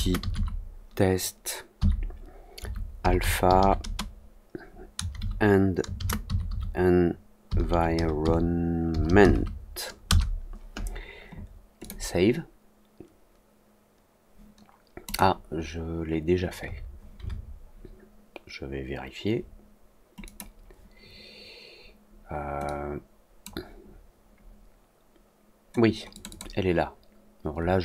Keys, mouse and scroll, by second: 11.7 click, 15.0 click, 20.2 click, 22.6 click, 26.0 click, 26.2 click.